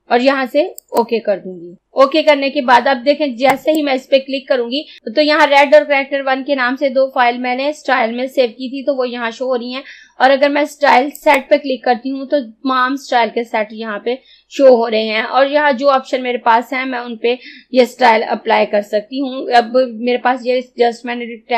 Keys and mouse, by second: 0.8 click, 3.6-5.0 drag, 11.2 click.